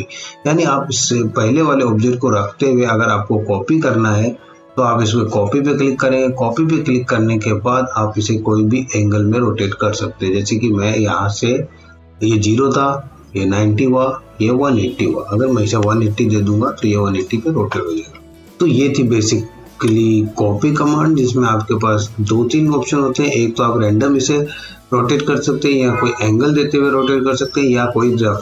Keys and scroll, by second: 15.8 KP_1, 16.0 KP_8, 16.6 KP_0, 17.1 Return.